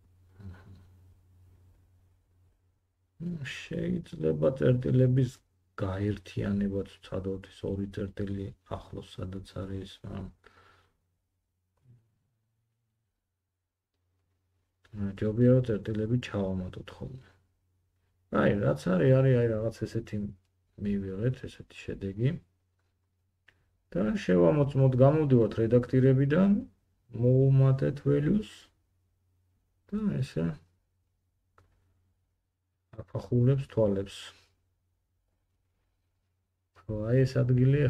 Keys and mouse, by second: 0.1 1, 1.5 middle click, 2.8 g, 3.1-5.8 drag, 10.9 g, 13.6-24.0 drag, 24.0 Tab, 27.5-37.8 middle drag.